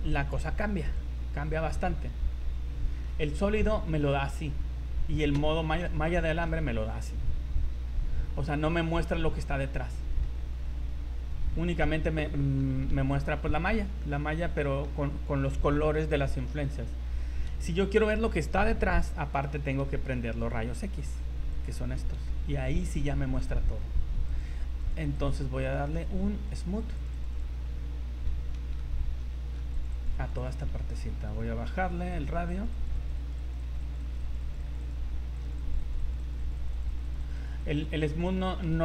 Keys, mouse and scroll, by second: 1.0 click, 1.8 Tab, 2.5 Tab, 2.7 scroll down 3, 3.0 shift+middle click, 3.4 scroll up 3, 4.8-5.3 scroll up 1, 5.3 z, 6.0 shift+middle click, 10.4 middle click, 11.4 middle click, 11.4 scroll down 1, 12.0 scroll up 2, 12.2 middle click, 12.9 z, 13.4 z, 13.6-14.0 scroll up 2, 14.0 shift+middle click, 14.2 shift+middle click, 14.2 scroll down 3, 14.5 middle click, 17.4 KP_1, 21.5 click, 22.3 shift+middle click, 22.7 scroll up 2, 24.3 click, 25.1 click, 25.9 scroll up 1, 26.5 click, 26.8 click, 27.0 click, 27.2 click, 27.4 click, 28.7 ctrl+z, 29.0 scroll up 2, 29.3 shift+middle click, 29.7 click, 29.9 click, 30.1 click, 30.5 click, 30.6 scroll up 3, 31.7 click, 32.6 click, 32.8 click, 33.0 click, 33.2 click, 33.4 click, 33.6 click, 33.8 click, 34.0 click, 34.2 click, 34.4 click, 34.6 click, 34.8 click, 35.0 scroll down 4, 35.3 click, 35.6 click, 35.8 click, 36.0 click, 36.2 click, 36.4 click, 36.6 click, 36.9 click, 37.1 click, 37.2 click, 37.3 click, 37.6 click, 38.0 click, 38.2 click, 38.4 click, 38.6 click.